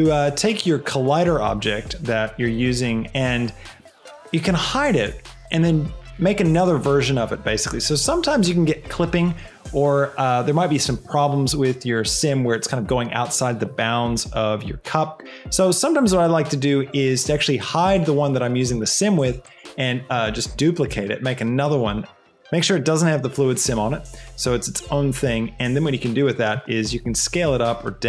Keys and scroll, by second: 20.4 shift+d, 20.8 Escape, 26.8 s.